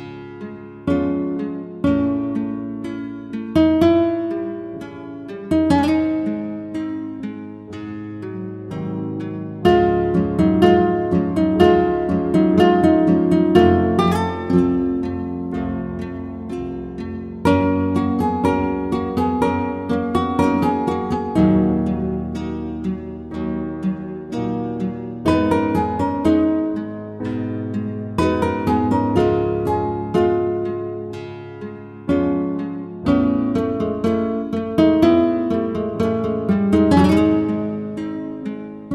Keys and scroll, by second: 3.1 Right, 3.3 Right, 3.6 Right, 3.8 Right, 7.3 Right, 7.8 Right, 8.1 Right, 26.2 Return, 27.4 ctrl+alt+z, 34.2 ctrl+shift+t.